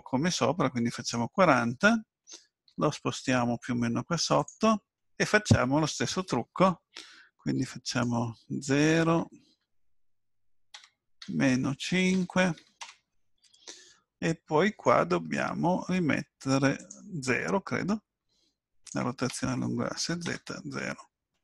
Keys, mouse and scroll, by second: 0.9 click, 2.7 g, 7.9 click, 18.8 click.